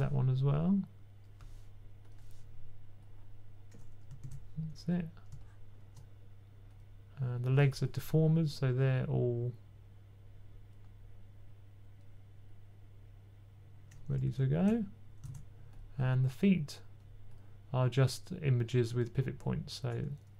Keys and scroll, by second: 4.0 super+z, 14.1 super+z, 14.4 super+z, 15.1 super+z.